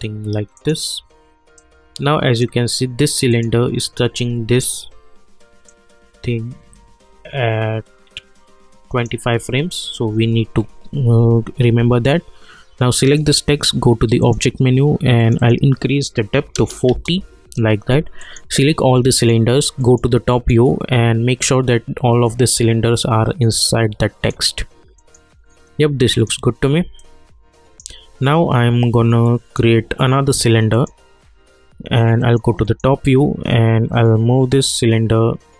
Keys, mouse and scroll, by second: 0.5-3.3 drag, 5.6-11.3 drag, 13.0 click, 16.8 Return, 18.2 click, 19.1 shift+click, 19.8 middle click, 22.2-25.0 drag, 25.0 middle click, 26.1 click, 27.0-30.7 alt+drag, 32.2 middle click, 33.3 scroll up 1, 34.7-35.5 drag.